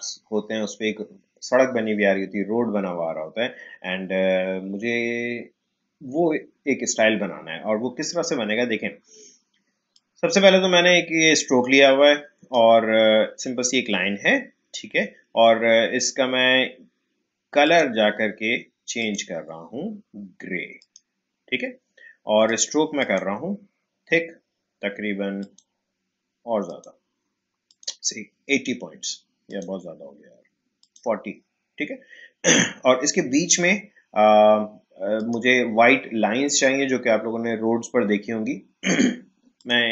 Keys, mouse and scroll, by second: 9.9-15.1 drag, 17.6 click, 25.4 click, 35.1 click, 39.5 click.